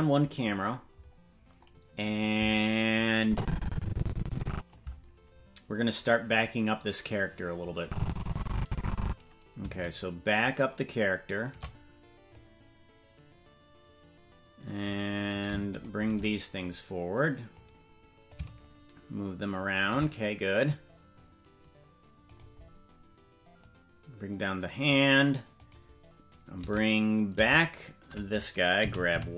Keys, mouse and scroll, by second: 0.9-2.5 scroll down 4, 1.4-2.5 scroll up 1, 3.2-4.7 drag, 7.8-9.1 drag, 10.4-11.6 shift+drag, 12.3-14.9 drag, 15.3 right click, 15.8 shift+right click, 16.6-17.6 drag, 18.2-19.9 drag, 22.4 right click, 23.6-24.9 drag, 25.6-27.2 right drag, 28.8 g.